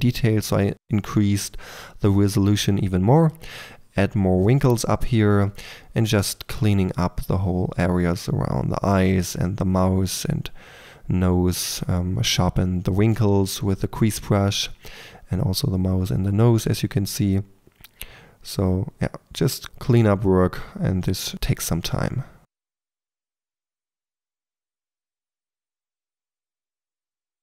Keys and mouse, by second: 0.2 1, 0.4 f, 0.5 f, 0.7 f, 1.1 middle click, 2.2 middle click, 2.5 middle click, 3.0 click, 3.5 middle click, 3.6 click, 4.2-5.9 drag, 4.3 KP_4, 6.1 click, 6.5-9.2 typing, 6.8 click, 7.8-8.2 drag, 8.9 click, 9.5 click, 9.9 shift+click, 10.6 drag, 10.7 f, 11.5 f, 11.9 click, 12.7 click, 12.7-14.3 typing, 14.3-16.1 drag, 15.9 middle click, 16.3 click, 17.2-27.4 typing, 18.6-19.8 drag, 20.2 click, 20.7-21.3 drag, 22.7 click, 22.8 click, 23.5 click, 23.9 drag, 24.5 click, 26.0 click, 26.4 click.